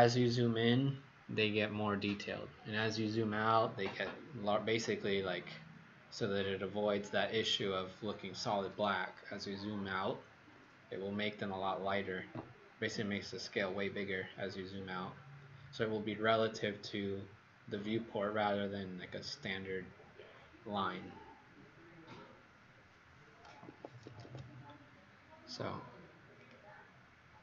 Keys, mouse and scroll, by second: 23.6 Escape, 24.0 Escape, 24.2 Escape, 26.3 click.